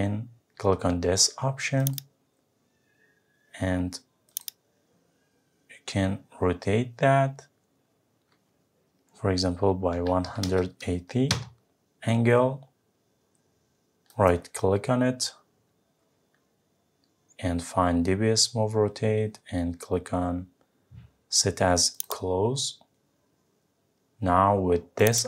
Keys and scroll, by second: 11.3 Return.